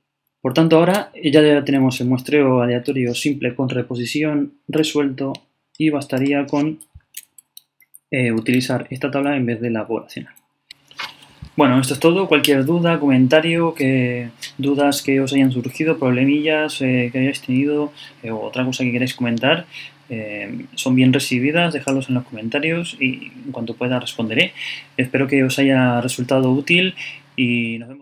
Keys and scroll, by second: 0.9 super+Up, 1.1 super+Down, 1.9 super+Up, 7.1 super+Left, 8.4 super+Up, 9.3 super+Down.